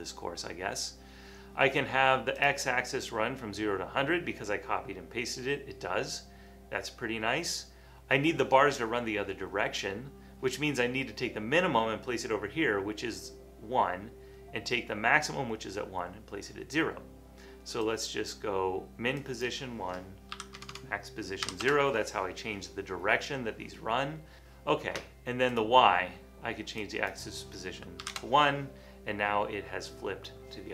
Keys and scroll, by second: 20.5-21.5 typing, 21.6 Return, 24.4 Return, 28.1 1.